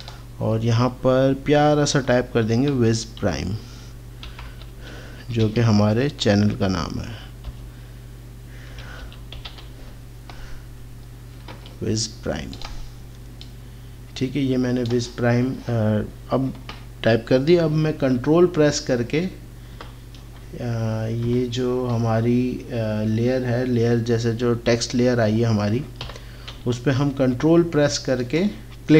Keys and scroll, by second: 2.6 shift+w, 4.2-5.4 typing, 7.4 shift+p, 8.6-9.4 typing, 19.7 ctrl+KP_8, 21.2 KP_8, 26.0 ctrl+KP_8.